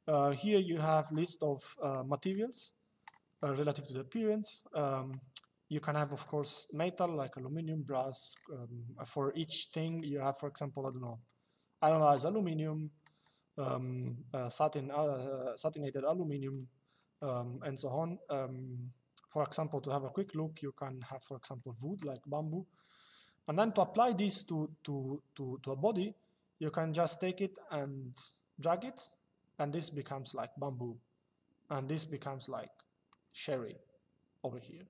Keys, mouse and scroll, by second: 5.8 click, 9.6 click, 15.7 click, 20.7 click, 26.7 click, 31.6 click.